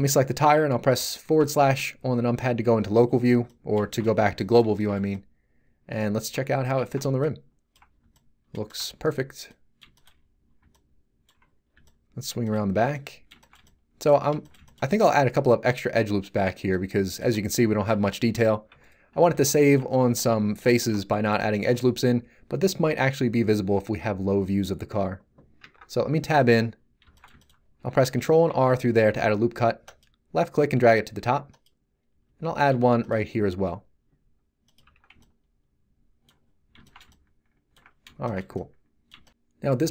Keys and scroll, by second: 1.3 /, 4.0 z, 6.5 a, 17.9 z, 25.6 Tab, 28.4 ctrl+r, 32.7 ctrl+r, 34.8 Tab.